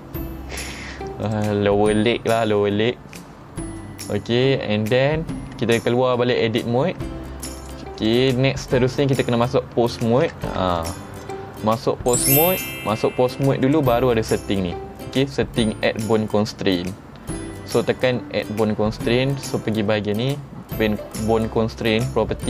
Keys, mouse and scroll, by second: 1.3 click, 7.0 Tab, 7.7 click, 8.1 click, 10.1 ctrl+Tab, 10.8 click, 11.3 click, 12.5 click, 13.7 click.